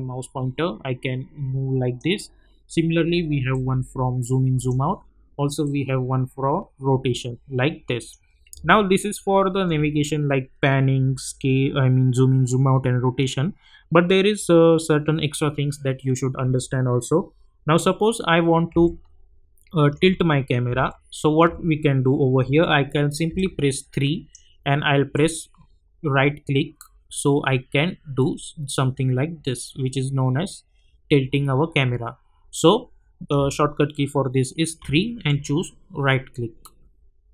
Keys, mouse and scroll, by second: 8.7-9.9 alt+middle drag, 18.1-18.7 scroll up 1, 18.8-20.1 alt+middle drag, 20.9-21.5 alt+middle drag, 23.3-33.5 typing, 23.3-24.6 click, 25.1 right click, 34.8-37.3 typing.